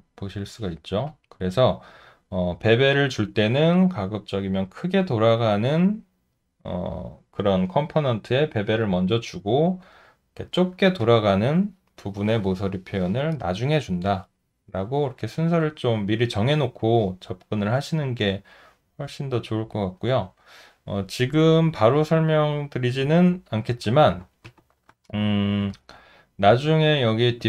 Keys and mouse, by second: 1.1 alt+click, 19.3 alt+middle click, 20.1 alt+right click, 23.2 ctrl+z, 25.1 shift+z, 26.0 alt+middle click.